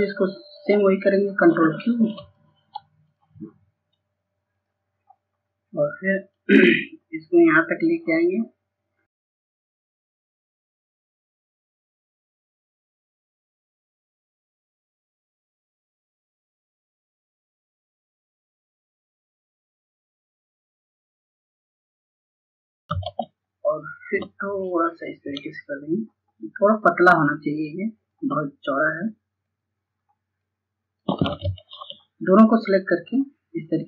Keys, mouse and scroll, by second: 2.2-4.5 drag, 10.6 ctrl+space, 11.9-22.8 drag, 23.0 ctrl+space, 24.0-28.2 drag, 29.0 shift+click, 31.8 ctrl+shift+z, 32.6 shift+click.